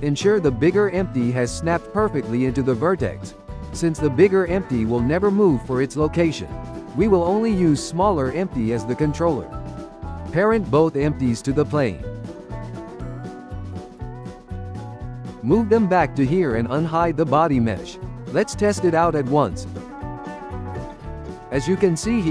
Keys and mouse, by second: 0.7 g, 1.6 g, 3.5 click, 4.5 g, 5.2 g, 6.6-7.1 drag, 7.6 click, 8.5 n, 10.4-11.2 ctrl+middle drag, 11.2 shift+click, 12.8 ctrl+p, 13.9-15.1 ctrl+middle drag, 15.1 g, 16.8 click, 17.9-19.4 drag, 19.4-20.5 shift+middle drag, 20.5 drag, 21.5 click, 21.9-22.3 shift+middle drag.